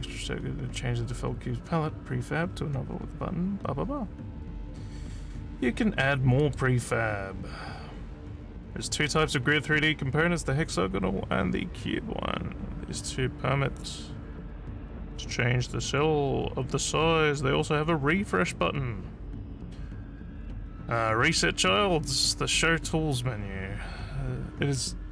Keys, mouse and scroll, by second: 6.3 click.